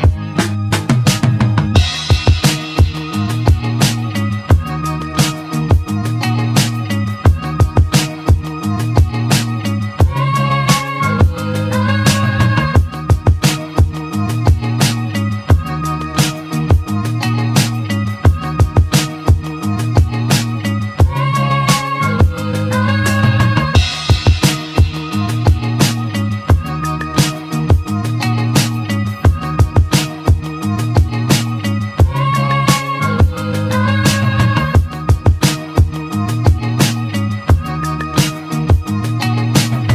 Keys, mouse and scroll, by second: 0.0 right click, 0.7 Tab, 1.6 click, 3.0 click, 3.2-5.7 drag, 8.8 scroll down 1, 9.2 click, 9.9-10.6 scroll down 3, 10.6-12.8 middle drag, 12.8-13.5 scroll down 1, 14.4-15.1 shift+middle drag, 15.1 scroll up 3, 15.4-15.9 scroll down 1, 15.9-18.4 shift+middle drag, 23.8-26.3 middle drag, 29.0-29.6 scroll down 2, 29.6-33.0 middle drag, 33.0 click, 33.7 click, 34.4 Tab, 35.2 `, 36.5 shift+middle click, 37.4 ctrl+r, 38.9 ctrl+r.